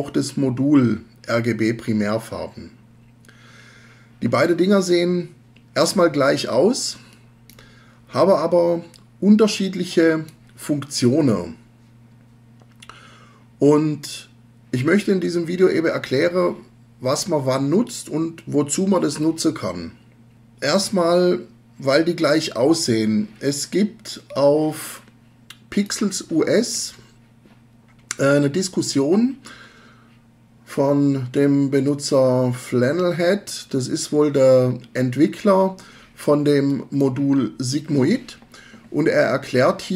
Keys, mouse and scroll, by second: 24.4-26.1 drag, 36.7 click.